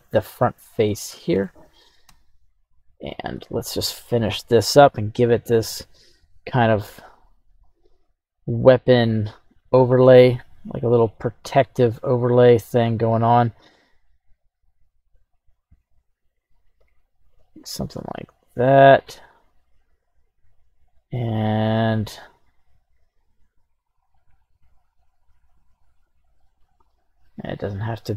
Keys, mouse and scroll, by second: 0.4 KP_1, 0.5-0.9 scroll up 2, 1.1 shift+middle click, 2.0 q.